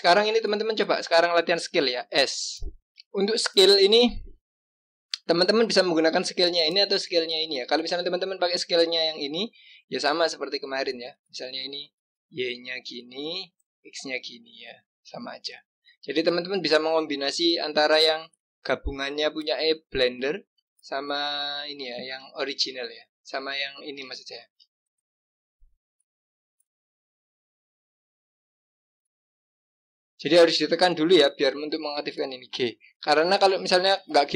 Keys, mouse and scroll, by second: 2.5 s, 3.2 click, 4.0 click, 8.7-11.8 drag, 16.3 click, 18.6 click, 21.2 click, 23.2 click, 24.2 shift+click, 26.5 g, 29.1-32.1 drag, 32.9 g.